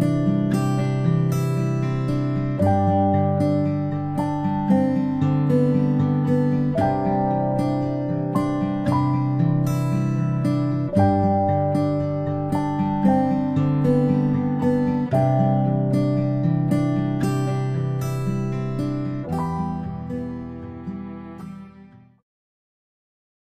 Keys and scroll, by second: 18.9 ctrl+z, 21.7 m.